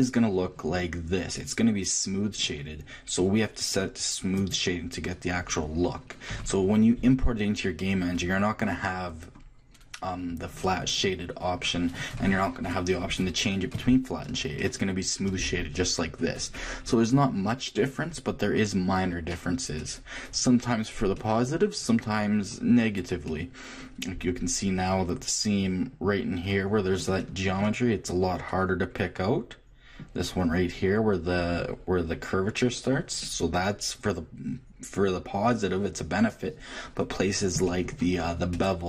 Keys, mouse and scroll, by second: 0.0 t, 1.4-3.2 middle drag, 4.3-6.2 drag, 6.3 t, 7.0-12.4 middle drag, 14.6-16.4 middle drag, 19.8-22.6 middle drag, 23.1-25.3 middle drag, 27.2-29.3 shift+middle drag, 33.2-35.2 middle drag, 37.2-38.8 shift+middle drag.